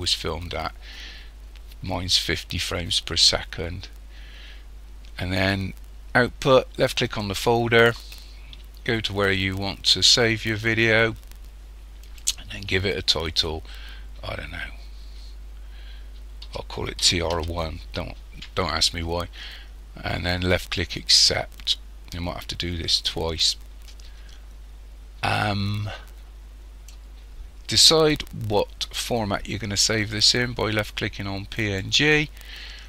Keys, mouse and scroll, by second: 7.1 click, 21.7 click, 25.4 click, 31.6 click.